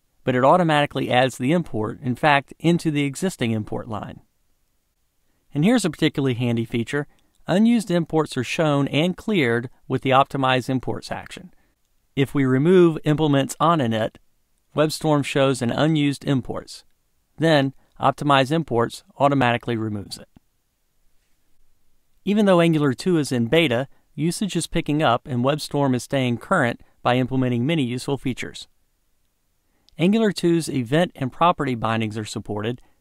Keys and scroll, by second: 2.4 Return, 16.8 ctrl+shift+super+a, 31.5 Return.